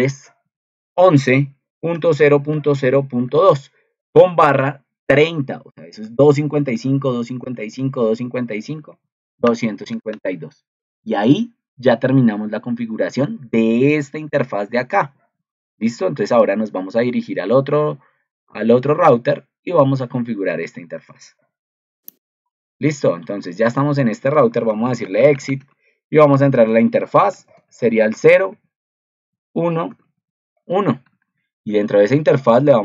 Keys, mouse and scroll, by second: 14.1 ctrl+2.